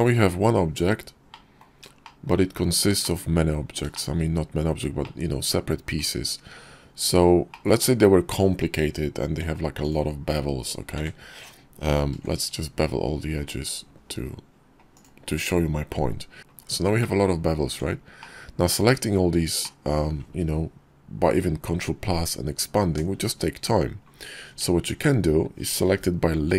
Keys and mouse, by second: 0.2 KP_5, 1.2 middle drag, 1.9 shift+click, 1.9 shift+middle click, 2.1 shift+click, 2.9 click, 3.8 shift+click, 4.9-5.4 drag, 5.4-5.8 middle drag, 7.3-7.6 middle drag, 9.1 Tab, 10.8 a, 11.8 ctrl+b, 15.0 Tab, 16.4 Tab, 16.8 drag, 17.5 Tab, 18.1 click, 18.6 click, 19.4 click, 24.3 Tab.